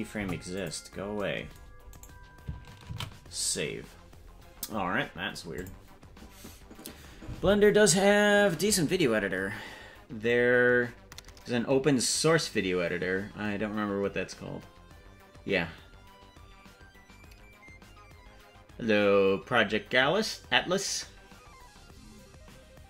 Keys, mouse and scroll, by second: 0.2 Delete, 1.9 right click, 5.0 ctrl+s, 5.6 click.